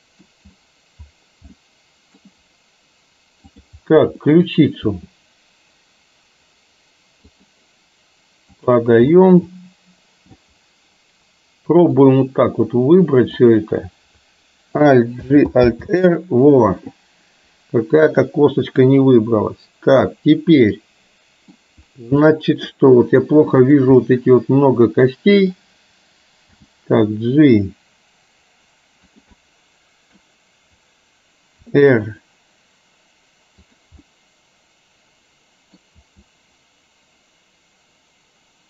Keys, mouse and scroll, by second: 1.7 middle click, 3.5-3.9 drag, 4.3 middle drag, 5.0 r, 8.7 click, 9.2-10.3 middle drag, 12.0-13.5 drag, 15.3 alt+g, 15.8 alt+r, 18.3-21.7 middle drag, 22.2-22.8 middle drag, 23.8 drag, 24.2-25.5 middle drag, 26.8 g, 29.4-30.2 middle drag, 31.8 r, 34.2-35.8 middle drag, 36.2 r.